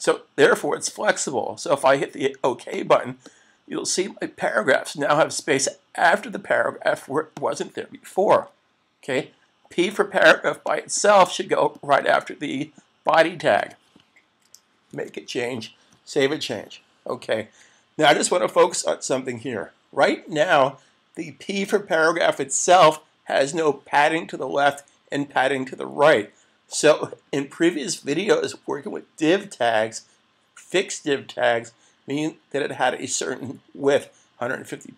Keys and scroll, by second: 8.4 super+s, 14.9 super+s.